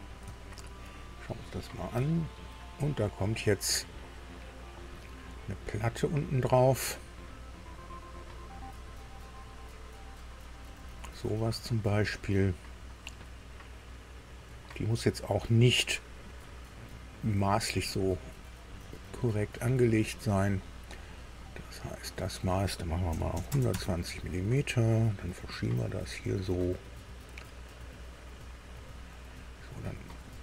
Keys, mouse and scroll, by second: 0.3 shift+middle click, 1.2-1.5 shift+scroll up 3, 2.7-4.7 shift+scroll up 3, 4.7 click, 8.1 click, 10.6 click, 12.1 right click, 13.0 scroll down 2, 14.4 scroll down 2, 15.3 scroll up 2, 16.1-16.5 scroll up 2, 17.9 click, 21.3 click, 23.1 KP_1, 23.3 KP_2, 23.5 KP_0, 23.7 KP_Enter, 25.7-28.9 drag, 30.2 click.